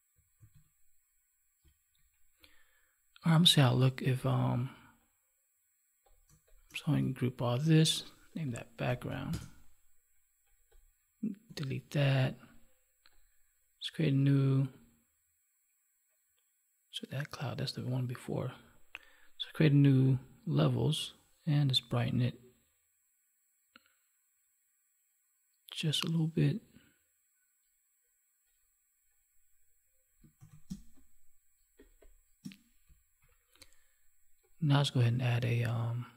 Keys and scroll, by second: 0.4 ctrl+s, 7.3 ctrl+g, 11.4 Delete, 30.4 ctrl+s, 30.7 space.